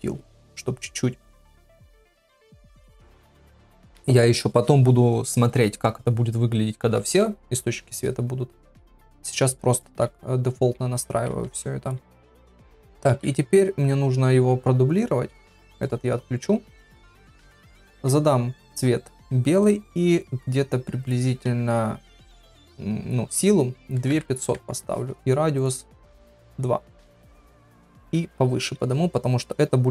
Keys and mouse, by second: 13.1 shift+d, 15.8 click, 17.9 ctrl+v, 22.3-25.0 drag, 24.3 KP_0, 25.6-26.8 drag, 28.0 KP_1, 28.7 g, 29.6 g.